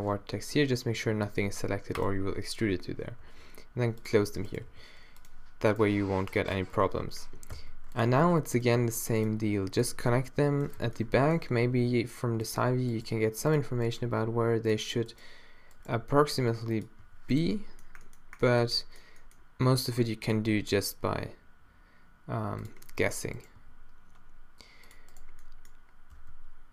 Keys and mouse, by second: 0.2 z, 1.0 middle click, 1.2 a, 2.0-3.3 super+drag, 3.3 e, 4.3 z, 4.7 g, 5.8 g, 6.8 z, 7.6 e, 8.0 click, 8.8 e, 9.4 e, 10.8 z, 11.8 g, 13.0 click, 13.1 g, 14.1 g, 15.9 g, 17.0 z, 18.5 middle click, 19.8 e, 20.4 e, 23.4 middle click, 23.6 g, 24.9 click, 25.4 middle click, 26.2 e.